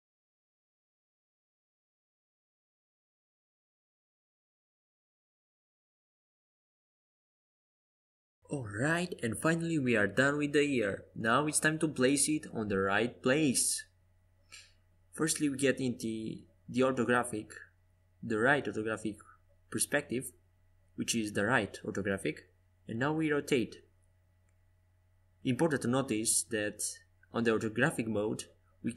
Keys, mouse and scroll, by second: 3.8-8.6 drag.